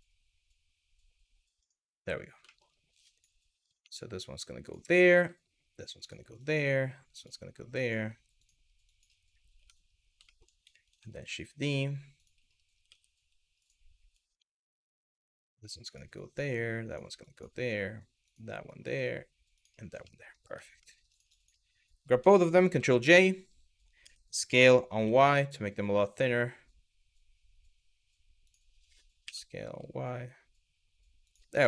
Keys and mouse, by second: 1.2 click, 2.2 shift+middle click, 2.8 click, 3.4 g, 4.3 click, 4.6 click, 4.8 g, 5.6 click, 6.1 click, 6.8 click, 7.5 click, 8.0 click, 8.6 click, 9.2 Tab, 9.9 shift+middle click, 10.9 shift+d, 12.5 s, 14.0 Tab, 14.7 click, 15.0 g, 15.5 click, 15.9 click, 16.0 g, 16.8 click, 17.9 click, 18.3 click, 19.2 click, 19.8 middle click, 20.1 Tab, 20.9 click, 22.3 ctrl+j, 22.8 middle drag, 23.6 s, 24.6 y, 28.1 click, 28.9 s, 29.3 y, 30.9 click, 31.4 middle click.